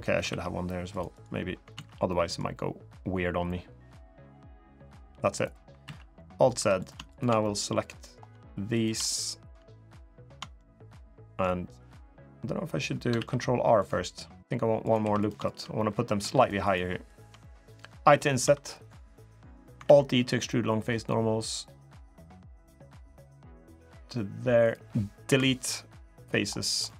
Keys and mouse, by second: 0.1 ctrl+r, 1.5 alt+z, 1.8 middle click, 3.9-5.2 drag, 5.6 alt+z, 5.9 middle click, 6.4 3, 7.0 shift+click, 7.2 middle click, 8.8 middle click, 9.0 click, 10.3 click, 11.0 click, 12.9 ctrl+r, 14.8 3, 15.2 shift+click, 15.5 click, 15.8 middle click, 16.1 shift+click, 16.8 shift+click, 17.2 middle click, 18.2 i, 19.6 alt+e, 25.0 Delete, 26.6 middle click.